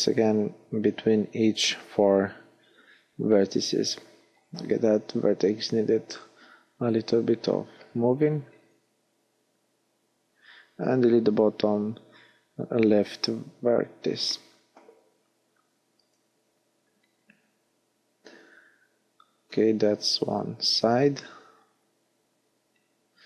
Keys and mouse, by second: 1.0 g, 8.0 f, 11.3 x, 13.4 x, 18.0-19.4 middle drag, 21.2-23.1 drag, 22.4 x.